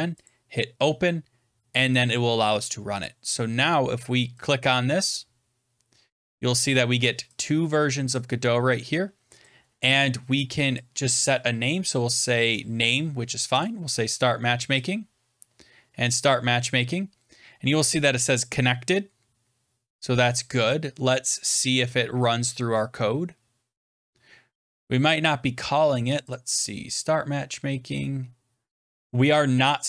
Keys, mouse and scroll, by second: 0.2 click, 2.9 click, 4.3 click, 6.5 click, 8.0 click, 9.4 click, 10.7 click, 13.5 click, 14.7 click, 16.0 click, 23.9 click, 24.9-25.5 scroll down 8, 26.1 click, 26.2 click, 27.0 scroll down 2, 27.7 scroll up 2.